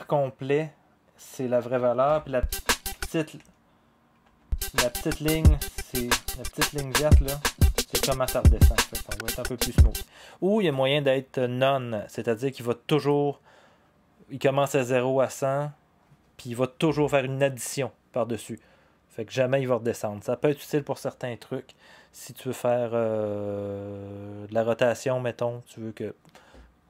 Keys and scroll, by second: 2.1 0, 2.9 0, 3.4 0, 4.2 0, 9.8 0.